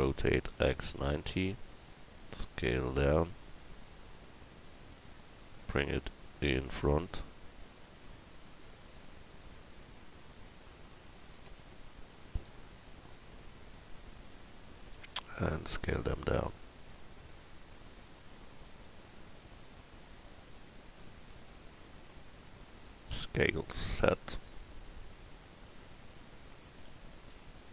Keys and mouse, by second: 0.0 r, 2.1 s, 3.8 s, 8.4-13.6 middle drag, 14.3 KP_1, 16.1 s, 19.5-21.3 drag, 21.3 s, 23.4 s, 25.7-27.7 drag, 26.9 s.